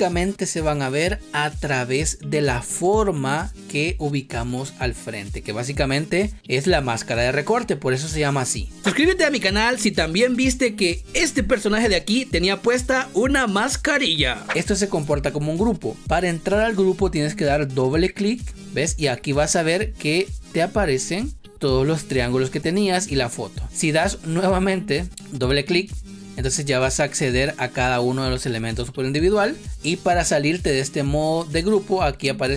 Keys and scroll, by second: 14.4 ctrl+z, 28.9 ctrl+z.